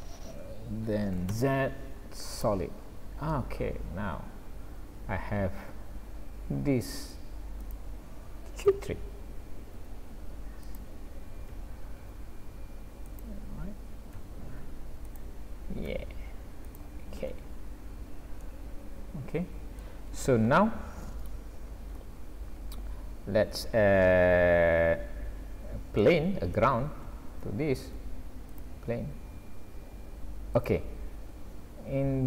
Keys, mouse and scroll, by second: 1.3 z, 2.8-3.3 scroll down 2, 3.4 middle click, 7.6 click, 8.7 l, 9.8 s, 11.6 s, 14.1 r, 15.9 g, 17.3-18.3 scroll up 3, 18.4 middle click, 20.1-20.6 scroll down 3, 20.9 scroll up 1, 21.6-22.1 scroll down 2, 22.1-22.6 scroll up 3, 22.7 scroll down 1, 26.0 middle click, 27.3 shift+a, 29.3 s.